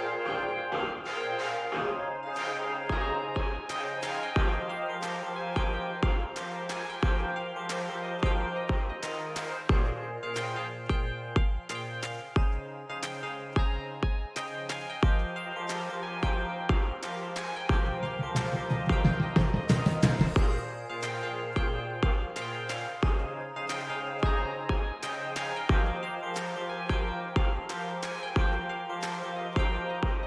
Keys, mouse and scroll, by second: 19.6-21.7 drag, 23.4-25.4 drag.